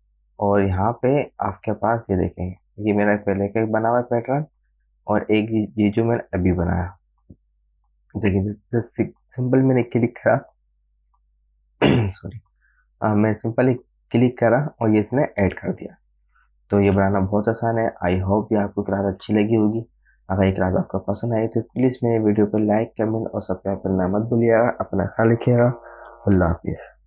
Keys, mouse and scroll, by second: 0.5 click, 7.4 click, 16.8 click, 17.4 space, 17.6 click, 17.9 space, 18.1 space, 19.0 space.